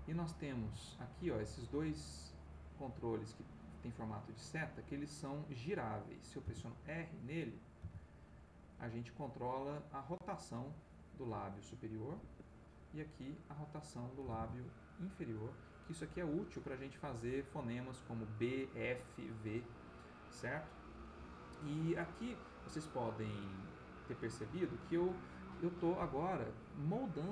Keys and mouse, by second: 0.8 ctrl+click, 2.0 click, 6.4 r, 7.8 r, 12.1 Escape, 12.9 click, 14.2 r, 18.8 Escape, 21.4-25.0 drag, 26.5-27.3 drag.